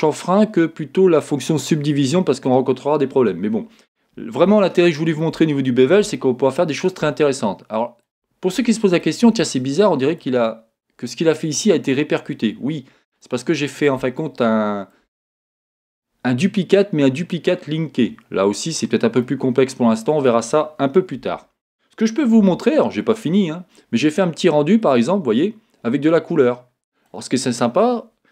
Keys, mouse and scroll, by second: 4.5-8.1 shift+middle drag, 5.6 scroll, 8.6 Tab, 8.6 middle click, 9.4-14.6 middle drag, 12.5-13.3 scroll down 2, 18.4 scroll down 1, 19.3 middle click, 21.2 a, 22.4 z, 26.7-27.8 middle drag, 27.4-28.3 scroll up 3, 27.9-28.3 middle drag.